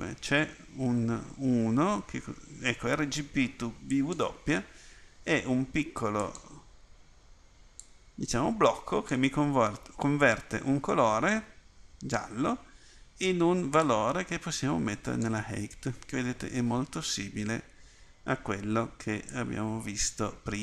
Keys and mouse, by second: 8.0-9.1 drag, 19.3 click.